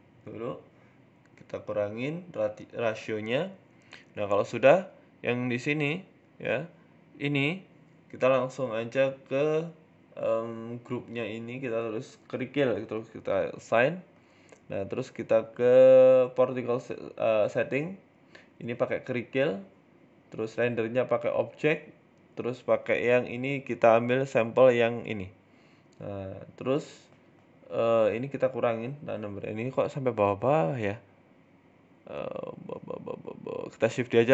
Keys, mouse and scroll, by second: 1.1 g, 1.7 s, 2.6 g, 3.8 right click, 4.0 shift+middle click, 4.3 Tab, 4.5 middle click, 5.0 click, 5.7 middle click, 7.1 scroll up 2, 8.7 click, 9.4 click, 10.3 click, 10.4 click, 12.6 click, 13.3 click, 13.7 Tab, 15.0 click, 15.5 click, 16.4 click, 16.6-17.3 scroll down 3, 17.8 click, 17.9 scroll down 2, 18.4 click, 19.1 click, 20.2 click, 20.9 click, 22.3 shift+middle click, 22.5 middle click, 23.1 click, 24.3 click, 25.1 middle click, 25.5 middle click, 26.5 middle click, 27.5 click, 28.5 middle click, 29.1 middle click, 29.7 Tab, 30.1 middle click, 31.8-32.3 scroll down 3, 32.1 middle click, 32.3-33.4 scroll up 3, 32.7 Tab, 33.5 shift+d.